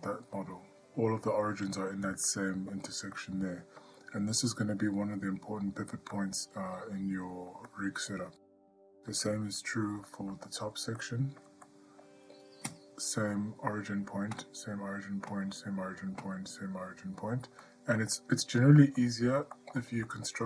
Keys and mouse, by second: 2.5-2.9 middle drag, 3.4-4.0 ctrl+middle drag, 6.4-6.9 ctrl+middle drag, 7.9-8.5 ctrl+middle drag, 8.9 middle drag, 9.5-9.8 shift+middle drag, 10.3 shift+middle drag, 11.2-11.6 ctrl+middle drag, 11.9-12.2 middle drag, 12.9 click, 17.8-18.2 ctrl+middle drag, 19.0 middle drag, 19.8 middle drag, 20.3 ctrl+middle click.